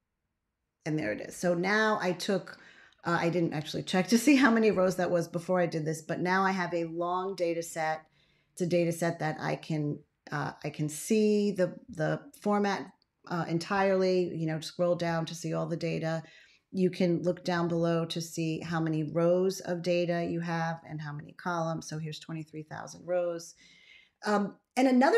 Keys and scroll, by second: 17.4 ctrl+a, 22.1 ctrl+x.